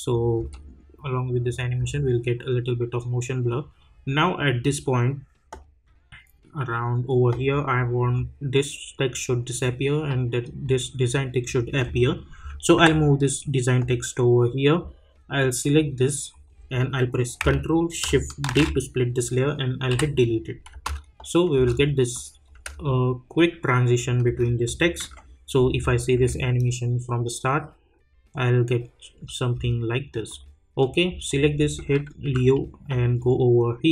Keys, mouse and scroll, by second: 0.5 space, 2.5-10.4 drag, 12.7 [, 15.6 click, 18.5 ctrl+shift+d, 20.7 space, 22.1 click, 22.5 space, 24.6 click, 25.0 u, 25.8 click, 27.0 space, 29.5 space, 30.2 click, 32.2 u, 33.2-33.9 drag.